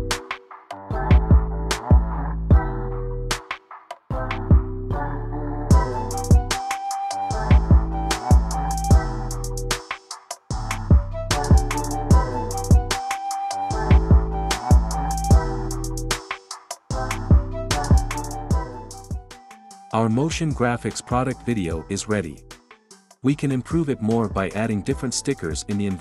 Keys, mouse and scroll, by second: 0.1 click, 0.5 click, 1.0 click, 1.5 click, 2.1 click, 2.6 click, 3.4 click, 3.8 click, 4.3 click, 5.2 click, 6.1 click, 6.6 click, 6.9 click, 8.7 click, 9.3 click, 9.7 ctrl+v, 10.1 click, 10.4 super+v, 11.1 click, 11.1 ctrl+v, 11.5 click, 11.9 space.